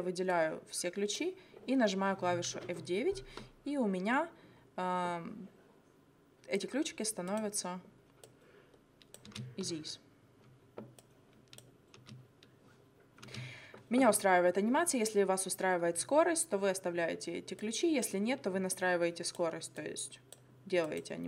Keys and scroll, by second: 2.6 F9, 9.3 space, 12.0 space, 13.3 space.